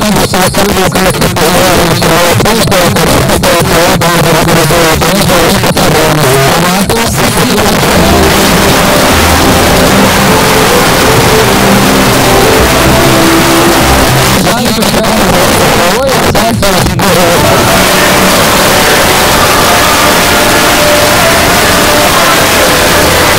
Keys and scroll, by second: 14.1 Page_Down, 23.3 space.